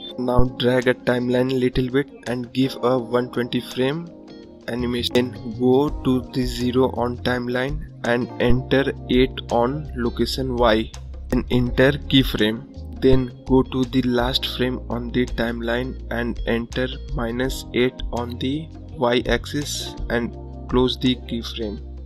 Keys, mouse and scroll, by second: 11.1-15.4 drag, 16.4-18.5 drag, 18.5-18.9 scroll up 5, 19.4 scroll up 1, 19.9 scroll down 1, 20.4 scroll up 1, 21.2 scroll up 1.